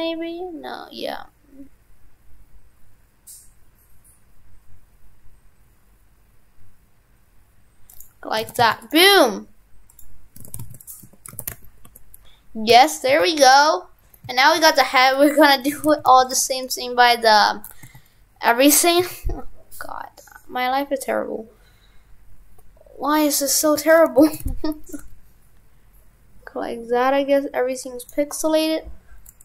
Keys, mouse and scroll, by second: 8.4 shift+f, 9.9 click, 10.4 shift+f, 11.1 Tab, 11.3 shift+f, 15.0 right click, 15.4 Tab, 15.7 shift+f, 16.5 right click.